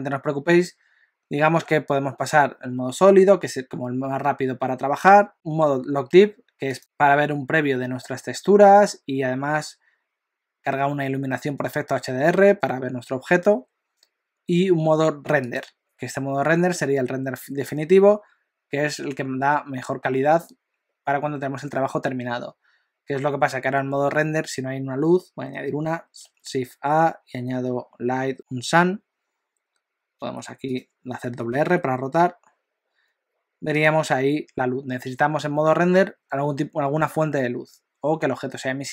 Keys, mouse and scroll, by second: 6.8 click, 15.7 click, 26.3 shift+a, 30.2 g, 31.5 r.